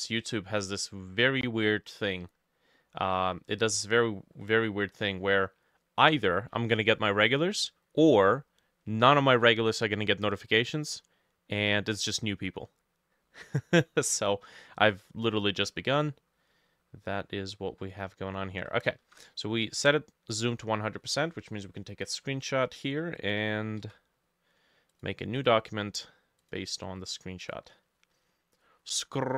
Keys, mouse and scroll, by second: 0.0 middle click, 1.6 middle click, 3.6 middle click, 4.4 middle click, 5.0 middle click, 13.5 middle click, 17.3 middle click, 19.1 shift+super+a, 23.8 ctrl+v, 25.4 double click.